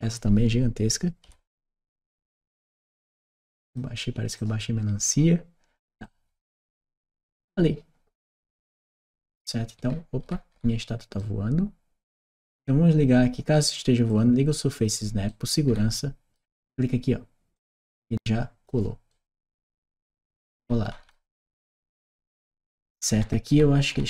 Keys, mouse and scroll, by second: 2.0-3.6 drag, 4.2-5.6 drag, 5.8-6.9 right drag, 7.2 click, 8.3-12.0 right drag, 12.0 click, 13.9 click, 14.6 click, 17.4-18.5 drag.